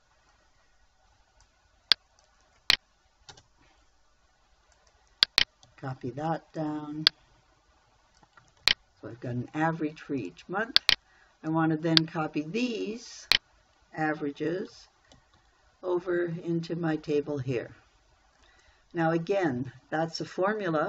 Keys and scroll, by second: 0.0-0.7 typing, 3.8 Return, 6.1 ctrl+c, 9.1 ctrl+v, 15.6 ctrl+c.